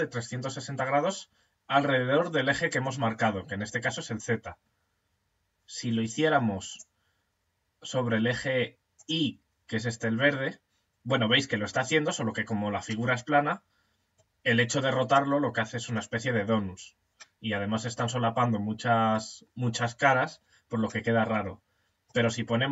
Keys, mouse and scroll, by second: 1.1-6.1 middle drag, 6.1 click, 10.4-22.7 middle drag.